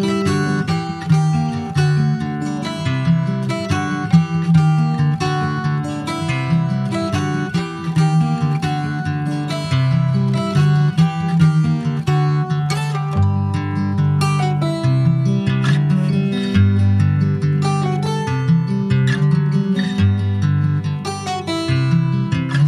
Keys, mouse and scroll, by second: 0.3 e, 2.5 click, 3.7 e, 5.4 ctrl+b, 7.3-8.7 shift+middle drag, 8.7 2, 8.9 click, 9.5 alt+shift+click, 10.5 ctrl+click, 11.5 alt+shift+click, 12.3 ctrl+b, 15.5 Tab, 15.8 click, 16.1 scroll down 1, 16.3 shift+middle click, 17.1 ctrl+s, 17.5 click, 18.1 shift+click, 19.3 ctrl+a, 20.5-22.3 right drag, 22.3 click.